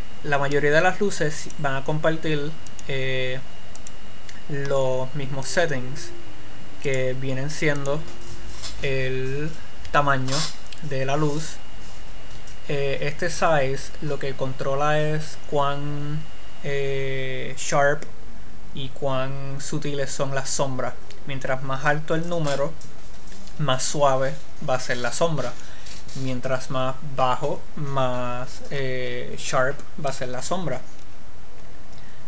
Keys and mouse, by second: 1.8-9.9 drag.